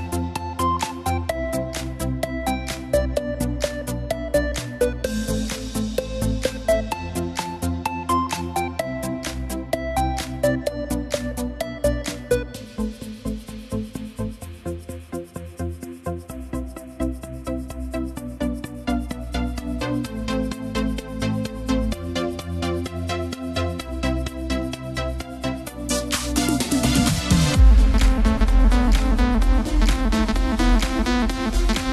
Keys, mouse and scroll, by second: 1.6-4.6 drag, 6.0-9.0 alt+drag, 9.9 ctrl+KP_Add, 11.7-14.7 shift+middle drag, 15.0 r, 19.8 g, 23.4-26.5 drag, 26.5-29.1 drag, 29.1 g.